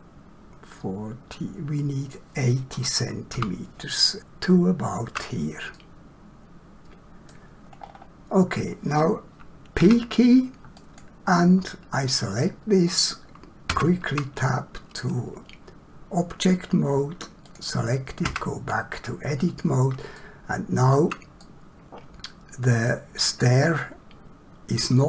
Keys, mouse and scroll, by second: 3.3 g, 5.8 middle click, 7.8 scroll down 1, 9.8 p, 10.7 click, 12.4 middle click, 13.7 Tab, 17.5 click, 18.3 Tab, 20.1 shift+middle click, 21.4 middle click.